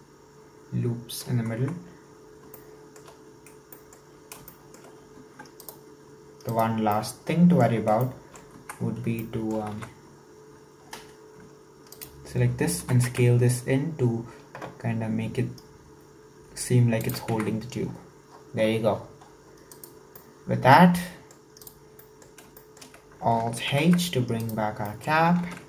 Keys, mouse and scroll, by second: 1.6 Tab, 2.0-2.6 scroll down 4, 2.6 shift+middle click, 3.3-3.8 scroll down 1, 3.8 middle click, 4.2-4.5 scroll up 3, 4.5 shift+middle click, 5.1 scroll up 1, 5.3 Tab, 5.6 right click, 6.5-6.9 right drag, 6.9-8.6 middle drag, 8.6 Tab, 8.7-9.2 scroll up 4, 9.2 shift+middle click, 9.8 alt+z, 10.1-11.9 scroll up 6, 11.9 alt+right click, 12.8 s, 17.4 Tab, 17.9-19.7 scroll down 31, 19.7 right click, 20.2-21.6 middle drag, 21.6-22.0 right drag, 22.0-23.7 middle drag, 23.7 alt+h, 24.4 right click, 24.9 middle click, 25.6 ctrl+s.